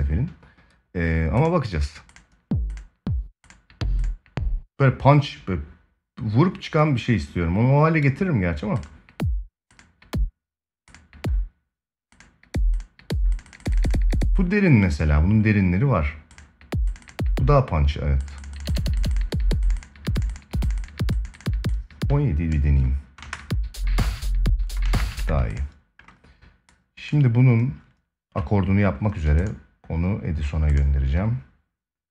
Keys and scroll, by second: 22.9 space, 24.6 space, 24.9 ctrl+s.